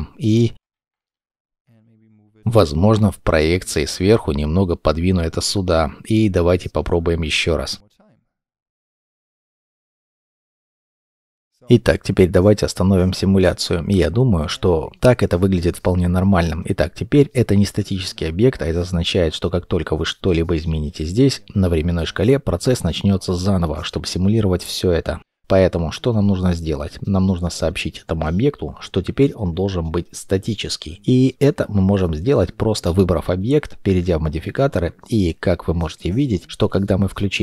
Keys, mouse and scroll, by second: 0.0 middle click, 0.1 g, 0.3 scroll down 1, 0.4 shift+middle click, 1.0 middle click, 2.0 middle click, 3.9 g, 5.9 r, 5.9 middle click, 7.0 shift+m, 10.7 scroll up 1, 10.8 middle click, 10.9 scroll down 1, 11.0-11.9 scroll up 1, 13.4 middle click, 17.4 middle click.